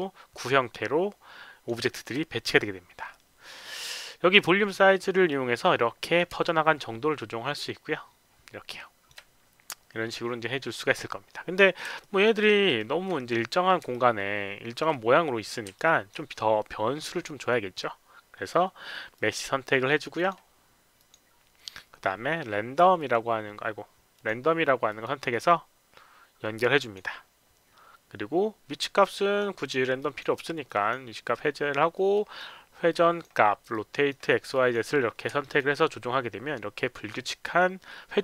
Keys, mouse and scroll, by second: 1.9 alt+middle click, 5.2 click, 6.4-9.0 alt+drag, 11.9 alt+click, 12.3 alt+right click, 12.6 alt+middle click, 13.8 alt+click, 15.7 alt+click, 19.1 click, 20.1 click, 20.9 click, 22.9 click, 24.1 click, 24.8 click, 26.7 click, 29.1 click, 29.9 click, 30.6 click, 31.9 click, 32.8 click, 33.7 click, 34.5 click, 35.4 alt+middle click, 35.7-38.2 alt+drag.